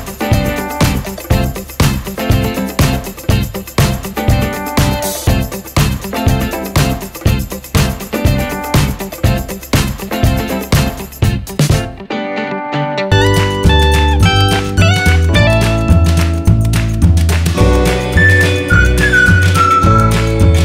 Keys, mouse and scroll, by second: 0.4 F4, 0.7 click, 5.3 F4, 5.7 click, 6.0 F4, 6.5 click, 7.5 click, 8.2 F4, 8.6 click, 12.8 F4, 13.1 click, 13.2 F4, 13.7 click, 15.4 F4, 15.7 click, 18.0 F4, 18.4 click, 18.5 F4, 18.9 click.